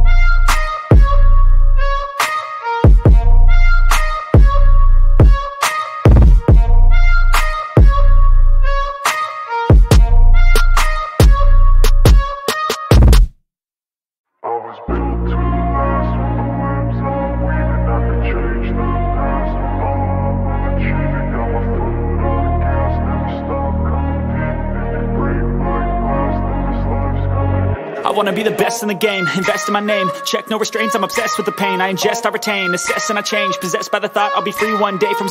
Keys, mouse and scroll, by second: 2.3 middle click, 2.7 click, 3.4 click, 4.5 click, 5.3 click, 7.9 click, 8.8 click, 9.6 click, 10.3 click, 11.2 click, 12.2 click, 13.2 click, 14.3 click, 17.7 shift+click, 18.3 shift+click, 19.4 shift+click, 20.5 shift+click, 21.1 shift+click, 21.5 shift+click, 22.8 shift+click, 23.4 shift+click, 24.7 shift+click, 27.1 click, 28.2 click, 30.0 click, 30.9 click, 32.1 click, 32.6 click, 34.4 shift+click.